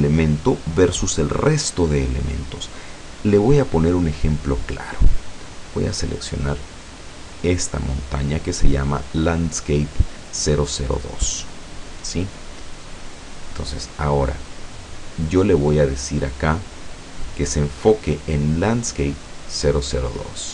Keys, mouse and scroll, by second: 7.5 click, 13.1 right click, 15.4-15.8 scroll down 2, 17.5 click, 20.0 click.